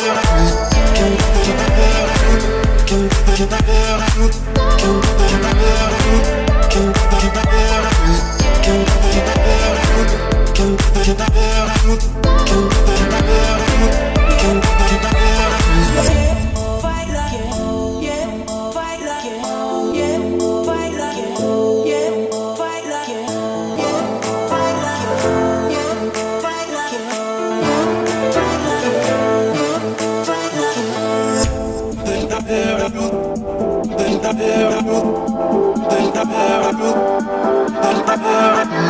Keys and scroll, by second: 2.7 o, 15.8 Escape, 16.9 Escape, 19.6 Escape, 24.0 Delete, 26.5 Escape, 29.6 o.